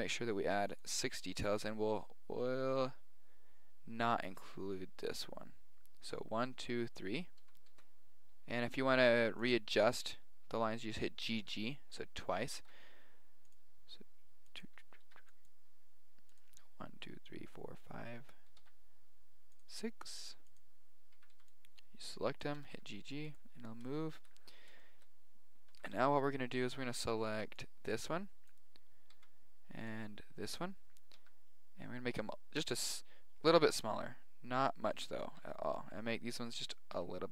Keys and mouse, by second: 7.3 g, 12.5 ctrl+r, 15.0 ctrl+r, 18.6 ctrl+r, 21.1 a, 21.3 b, 22.5 g, 23.6 middle click, 24.7-26.0 middle drag, 25.7 a, 25.9 b, 26.3 middle click, 29.1 b, 31.1 s, 35.2 a, 35.4 b, 36.9 s.